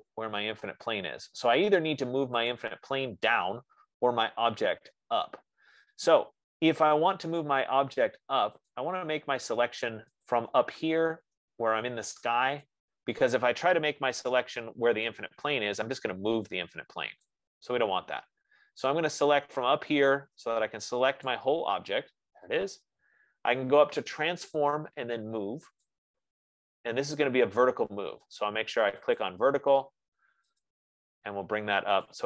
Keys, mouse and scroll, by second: 3.0-8.0 drag, 9.0 click, 13.1 click, 14.9 Escape, 17.6 click, 18.1 Escape, 21.9 click, 25.1 click, 26.4 click, 29.6 middle click, 31.0 middle click.